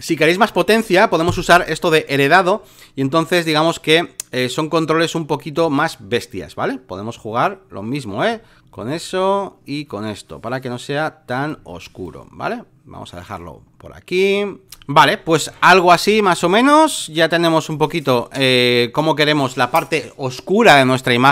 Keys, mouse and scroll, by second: 1.2-14.6 drag, 16.4-21.3 drag.